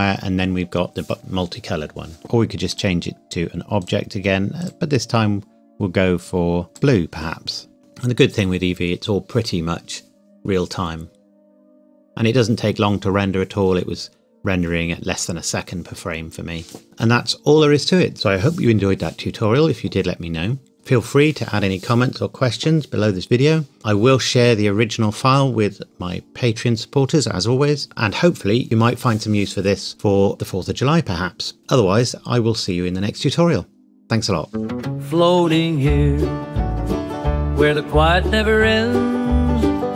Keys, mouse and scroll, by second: 2.2 click, 2.7 click, 16.8 click, 18.1 space.